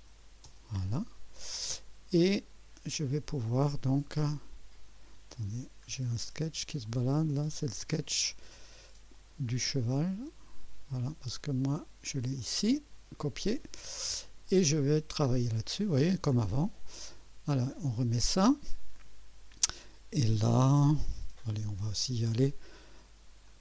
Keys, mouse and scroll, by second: 0.5 Return, 4.8 click, 5.6 scroll down 2, 6.9 click, 7.5 scroll down 1, 7.6 scroll up 1, 9.1 click, 10.1 space, 11.3-11.6 scroll down 1, 12.4 click, 12.8 scroll down 1, 14.3 click, 15.3 scroll up 1, 15.9 right click, 16.6 scroll up 2, 17.1-17.7 right drag, 17.8 scroll down 1, 18.3-18.9 right drag, 23.5 click.